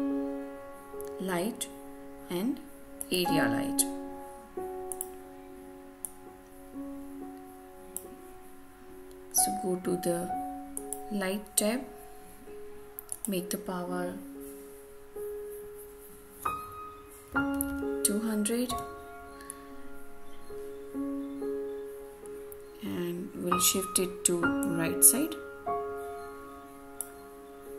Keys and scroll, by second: 18.6 Return.